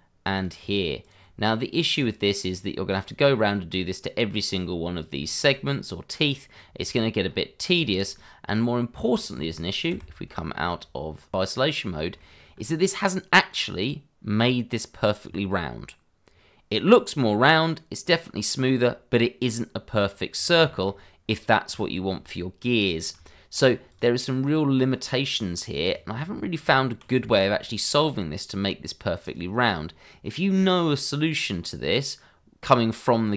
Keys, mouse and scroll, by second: 1.0 ctrl+click, 2.0 click, 3.3 scroll down 1, 5.2 shift+middle click, 6.2 click, 6.5 scroll up 1, 6.8 shift+middle click, 7.2 scroll up 1, 7.8 shift+middle click, 9.9 /, 12.1 shift+middle click, 12.3 middle click, 12.4 shift+middle click, 12.5 scroll up 1, 14.3 scroll down 1, 18.6 scroll up 1, 19.9 scroll down 1, 20.6 shift+middle click, 21.2 scroll up 1, 21.8 shift+middle click, 22.8 scroll down 1, 23.1 Tab, 23.7 scroll down 1, 23.9 click, 24.5 middle click, 25.8 click, 26.1 scroll up 1, 26.6 Tab, 27.2 shift+middle click, 27.3 middle click, 29.2 click, 32.6 scroll down 1.